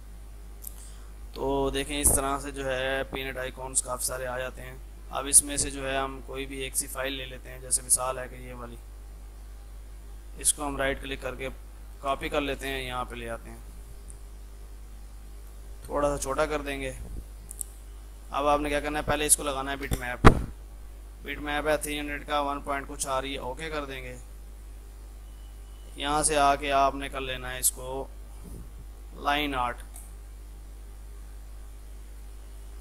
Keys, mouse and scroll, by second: 2.6 scroll down 1, 5.3 scroll up 1, 8.2 click, 10.4 right click, 11.4 click, 11.8 alt+Tab, 12.7 ctrl+v, 13.2 F4, 14.5-16.9 shift+drag, 16.9 shift+F2, 17.3 F3, 18.2 click, 19.7 alt+b, 23.4 click, 24.7 ctrl+s, 25.9 click, 30.0 click.